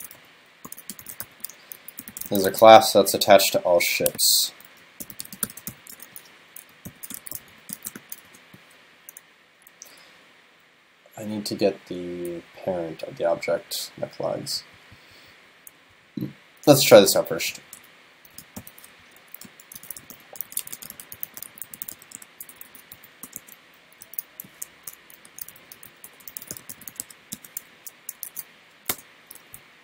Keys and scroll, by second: 2.5 super+s, 19.0 super+Left, 24.8 shift+super+Left, 27.8 super+Right, 28.3 super+s.